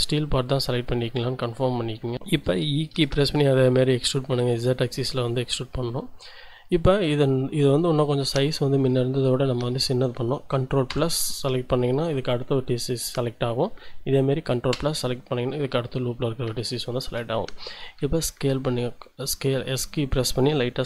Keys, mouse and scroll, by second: 2.1 click, 2.9 e, 3.2 z, 7.6 click, 8.1 scroll up 1, 14.7 ctrl+KP_Add, 16.7 shift+click, 18.1 s, 19.7 Escape.